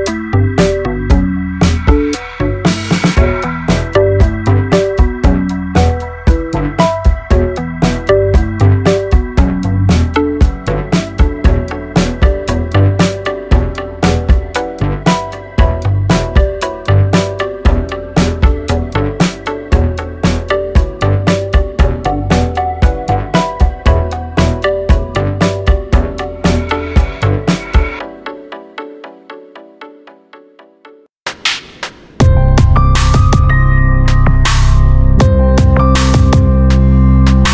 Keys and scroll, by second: 5.2 ctrl+1, 6.0 alt+z, 7.7 alt+z, 9.4 ctrl+b, 15.7 ctrl+1, 17.3 alt+s, 18.9 alt+z, 21.5 alt+z, 23.6 alt+b, 25.5 alt+z, 29.9 alt+b.